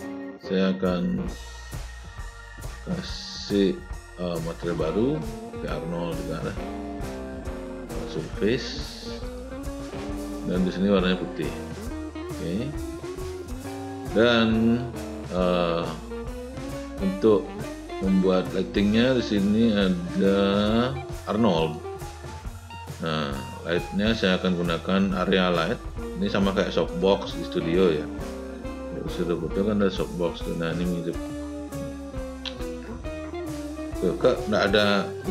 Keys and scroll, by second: 28.8 r, 32.5 w.